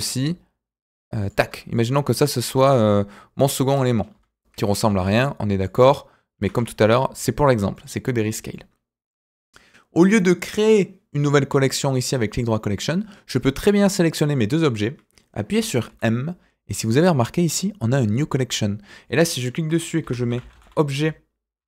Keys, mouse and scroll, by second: 1.7 click, 1.9-2.3 middle drag, 2.5-3.3 scroll up 1, 3.3 click, 4.1 Delete, 4.8 shift+a, 6.3 s, 7.7 middle click, 8.2 click, 8.5-9.1 middle drag, 11.8 right click, 13.6-14.2 drag, 15.8 m.